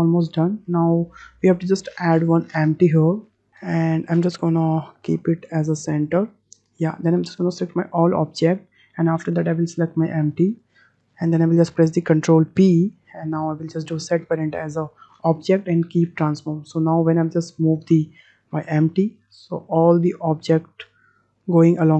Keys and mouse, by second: 3.5 ctrl+z, 3.6 ctrl+z, 4.8 click, 6.0 click, 8.3 drag, 9.8 shift+click, 10.6 shift+click, 12.6 ctrl+p, 16.7-17.0 middle drag, 17.7 click, 18.8 g.